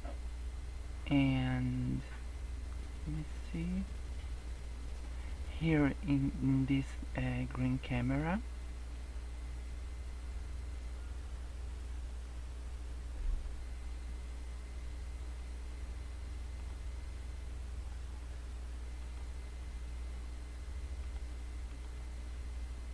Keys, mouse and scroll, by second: 2.6-3.0 scroll down 2, 3.0-3.4 scroll up 2, 8.0 click, 11.4-12.4 scroll down 3, 13.0-14.5 scroll down 3, 16.6 click, 19.0 click, 19.4-21.0 scroll up 4, 21.0 click, 22.1 scroll down 3.